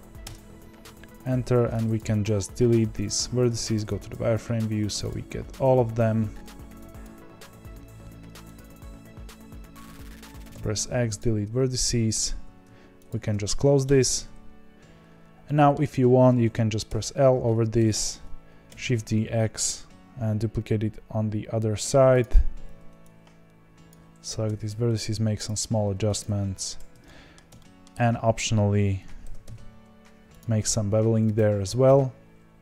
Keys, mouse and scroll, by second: 1.9 click, 3.5 z, 4.1 click, 5.0 x, 7.0 click, 11.1 x, 11.7 middle click, 12.4 2, 13.0 alt+click, 13.8 f, 15.4-16.8 middle drag, 16.8 l, 17.7 KP_1, 18.6 shift+d, 22.6 1, 23.8 click, 24.5 g, 26.1 click, 26.7 z, 27.0-28.0 middle drag, 28.0-29.2 scroll up 2, 29.2 ctrl+b, 31.3 click.